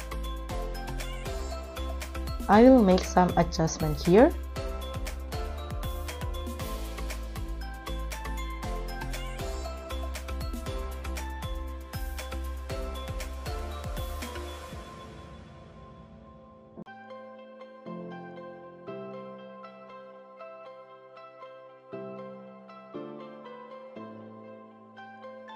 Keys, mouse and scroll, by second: 4.4 scroll down 1, 4.5-5.0 scroll up 1, 11.7 t, 12.0 r, 18.3-18.8 scroll down 16, 22.7 scroll up 3, 22.9 scroll down 3, 23.0 scroll up 9.